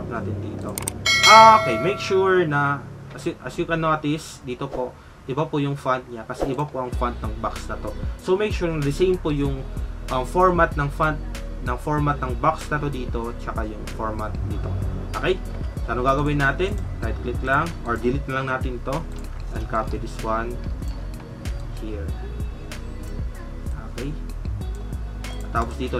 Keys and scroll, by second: 1.5 alt+Tab, 2.9 alt+Tab, 19.2 alt+Tab.